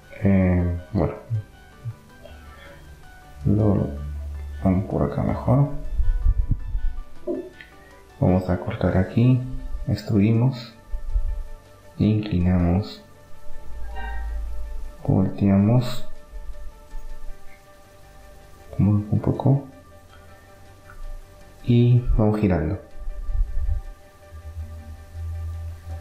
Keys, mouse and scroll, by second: 0.0-1.2 drag, 1.2 Tab, 1.2-2.7 middle drag, 2.7-5.7 right drag, 8.0 e, 12.3-14.0 drag, 13.7 middle click, 13.9 middle click, 14.8 r, 17.0-19.0 drag, 20.0 e, 22.3 r.